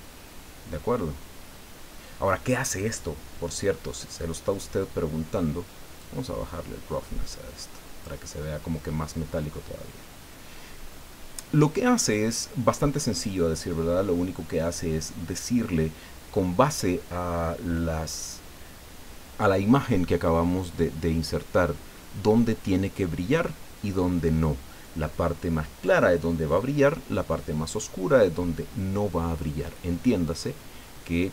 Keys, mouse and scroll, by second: 3.7-4.0 scroll up 1, 4.4 scroll down 2, 6.0-8.2 drag, 10.1 scroll down 2, 10.9 scroll up 2, 30.2-30.5 scroll up 2, 31.1 scroll down 2.